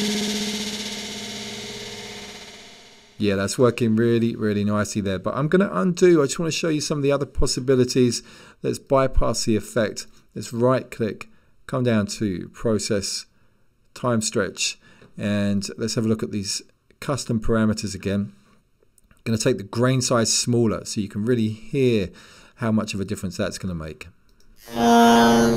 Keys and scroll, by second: 6.2 super+z.